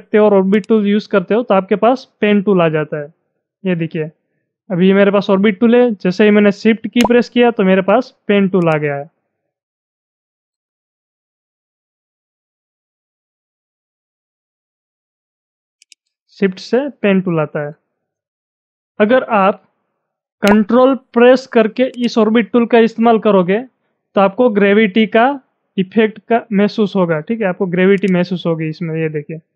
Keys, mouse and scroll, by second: 0.6-6.3 shift+drag, 6.6 shift+Num_Lock, 6.6-8.6 shift+drag, 8.6-12.1 shift+drag, 15.7 shift+Num_Lock, 15.8-20.2 shift+drag, 20.8-21.9 shift+drag, 21.9-28.0 ctrl+drag, 28.0-29.5 ctrl+drag.